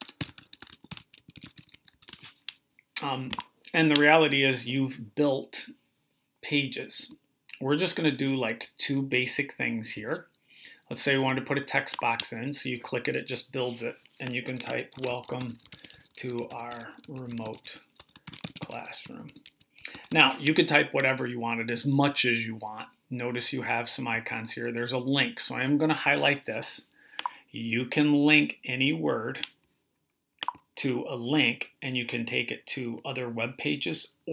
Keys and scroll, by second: 0.0-2.2 typing, 14.6-20.5 typing.